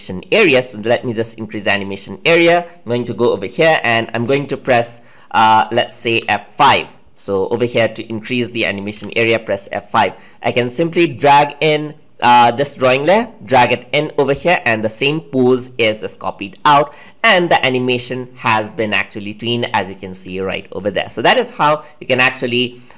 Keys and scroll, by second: 6.1 F5.